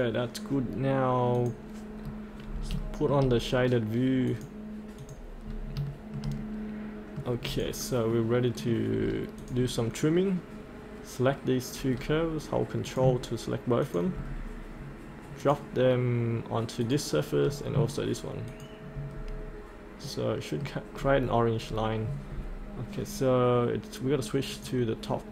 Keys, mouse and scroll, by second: 2.1-2.7 scroll up 1, 2.9 shift+middle click, 4.3 click, 5.4 scroll up 1, 5.9-9.0 shift+middle drag, 9.0-9.4 scroll down 1, 9.4-10.5 drag, 11.9-12.5 scroll down 1, 13.8 ctrl+click, 14.2-15.4 scroll up 1, 15.4 click, 17.5 scroll down 1, 18.5 ctrl+click, 19.2-20.1 scroll up 1, 20.1 middle click, 20.9-21.7 scroll down 1, 21.7-22.9 scroll up 1, 22.9-24.5 scroll down 1, 24.5 click.